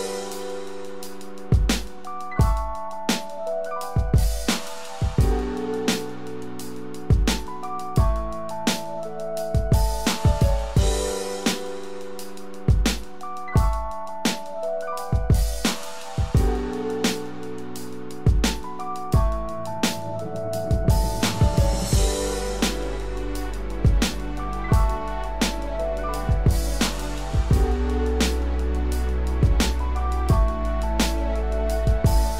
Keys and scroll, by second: 16.9 ctrl+-.